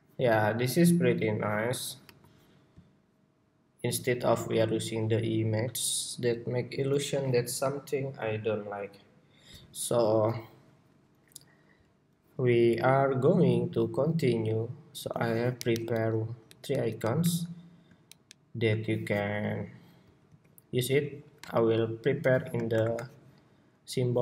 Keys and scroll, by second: 20.0 super+c, 20.8 super+c, 22.4 shift+super+y, 23.0 shift+super+y.